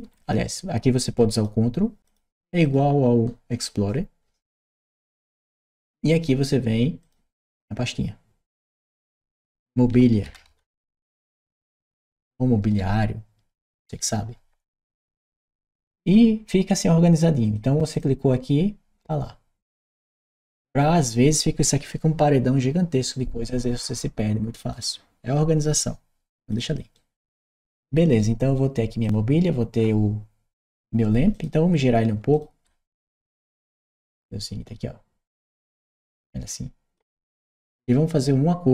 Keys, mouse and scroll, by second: 0.0 shift+click, 1.1 ctrl+click, 1.8 ctrl+click, 2.4 ctrl+click, 4.7 ctrl+right click, 6.8 ctrl+click, 10.1 shift+m, 13.5 Return, 15.4 click, 17.3 click, 17.7 click, 19.5 click, 24.5 click, 26.3 click, 26.8-28.0 right drag, 28.8 click, 31.1 click, 32.1 shift+click, 33.9 shift+click, 35.1-36.7 shift+drag, 37.6 shift+click.